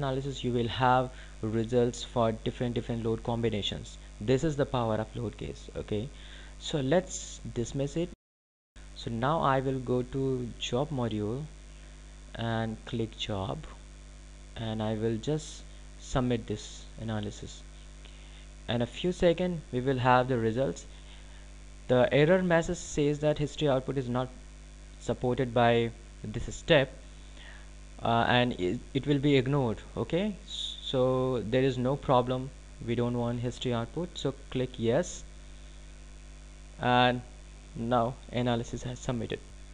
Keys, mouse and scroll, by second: 8.3 click, 18.1 click, 31.0 click.